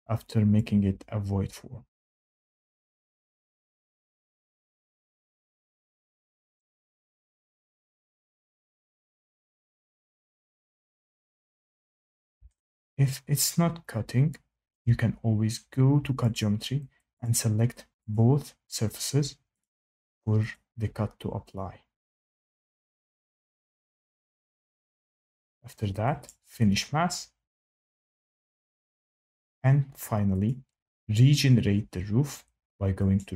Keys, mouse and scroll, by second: 0.5 click, 2.6 click, 3.8 click, 5.4 click, 6.5 click, 7.1 click, 9.4 click, 10.7 click, 11.3 click, 14.6 shift+middle click, 16.3 click, 17.2 click, 18.1 click, 19.5 click, 20.5 click, 21.5 click, 22.1 click, 23.3 click, 24.3 click, 26.2 click, 30.4 click, 33.1 click.